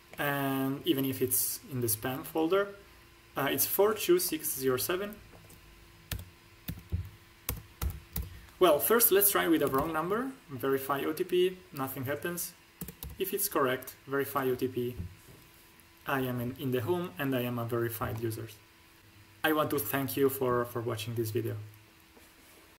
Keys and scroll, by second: 6.0-8.1 typing, 9.6 BackSpace, 9.7 8, 12.7 BackSpace, 12.9 7.